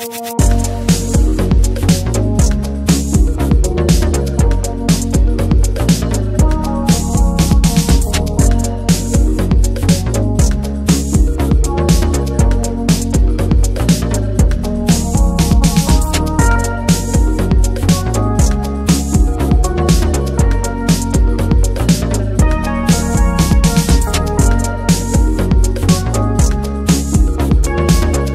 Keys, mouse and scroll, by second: 0.5 click, 2.3 scroll down 1, 2.5-2.9 scroll up 1, 2.9-6.4 middle drag, 6.4-6.8 scroll up 2, 6.8 click, 7.0 middle drag, 8.1 click, 9.9 ctrl+a, 10.3 click, 11.1 shift+h, 12.0 click, 12.7-13.8 middle drag, 13.8-19.8 drag, 19.8-21.4 middle drag, 21.4 click, 21.9 scroll down 1, 22.1 middle click, 22.7-23.7 scroll up 4, 22.9 middle click, 23.2 shift+middle click, 23.5 middle click, 24.0-25.2 shift+drag, 25.2 scroll down 2, 25.4-28.3 middle drag.